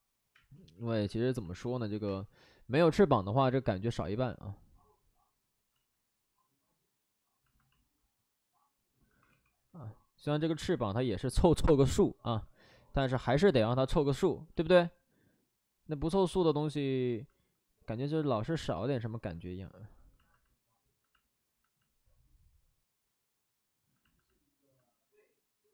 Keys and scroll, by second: 0.3 space, 2.0 x, 4.4 space, 5.7 ctrl+z, 9.2 w, 10.5 ctrl+z, 14.5 ctrl+z.